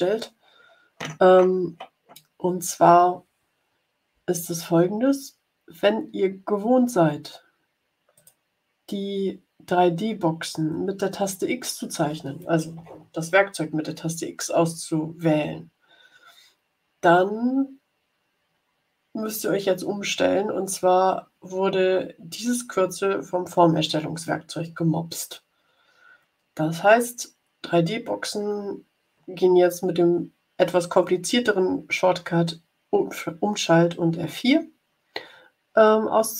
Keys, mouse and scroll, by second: 8.1 click.